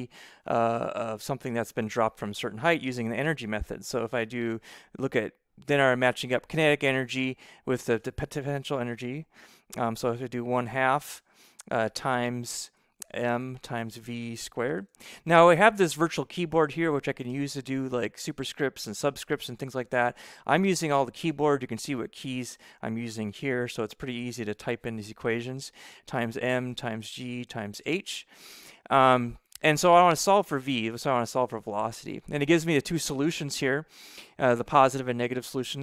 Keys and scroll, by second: 9.8 1, 10.6 2, 11.3 Right, 12.6-15.3 typing, 23.8 =, 25.9-28.2 typing, 30.6 v.